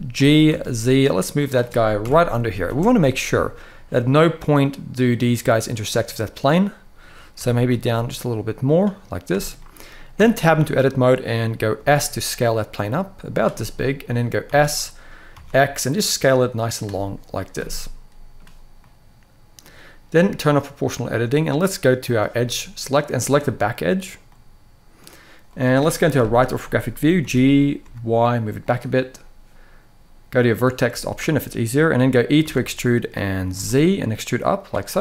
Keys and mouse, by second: 0.2 z, 1.1 click, 1.7 KP_1, 2.4 space, 7.1 g, 8.3 click, 9.0 space, 9.4-9.7 middle drag, 9.9 Tab, 10.1 middle click, 11.5 s, 13.0 click, 13.3 middle click, 14.2 s, 15.0 x, 16.4 click, 17.3 middle click, 20.2 click, 21.8 click, 22.1 middle click, 23.0 click, 25.2 middle click, 25.8 KP_3, 26.9 g, 27.5 y, 28.3 click, 30.2 click, 30.7 shift+middle click, 32.1 e, 33.3 z, 34.3 click, 34.8 middle click.